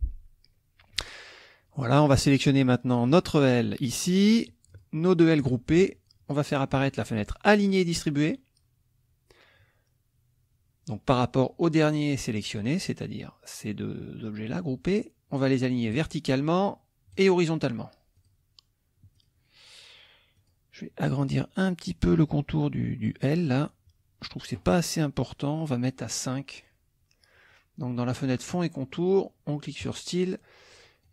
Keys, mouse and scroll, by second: 3.1 click, 4.7 shift+click, 7.5 click, 16.0 click, 17.1 click, 18.1 click, 19.1 click, 20.3 click, 29.8 click, 30.7 click.